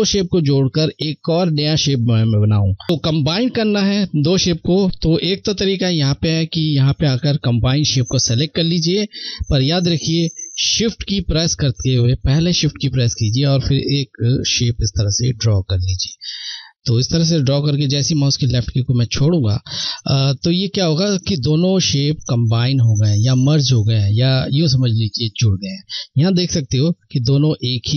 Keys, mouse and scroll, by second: 5.5 click, 7.9 click, 12.9 shift+Num_Lock, 12.9 click, 13.1 click, 13.2 shift+click.